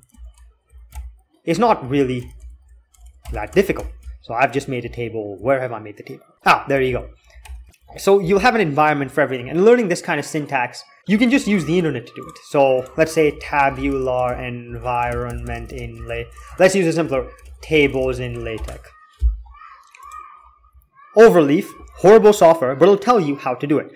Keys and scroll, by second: 0.0-5.0 typing, 6.2-8.1 typing, 6.7 alt+k, 11.1 alt+x, 11.3 alt+x, 13.0-18.8 typing, 16.7 ctrl+BackSpace.